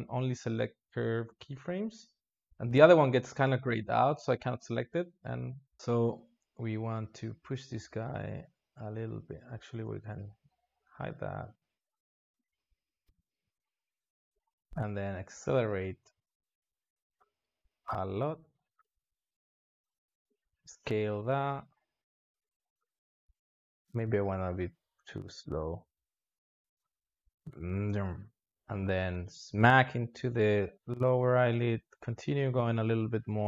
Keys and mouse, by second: 10.0 alt+shift+z, 11.2-13.1 drag, 13.4-16.8 drag, 17.1-18.6 drag, 18.6 s, 19.6 click, 20.4 s, 21.7-25.9 drag, 25.9 r, 26.8-30.0 drag, 33.3-33.4 drag.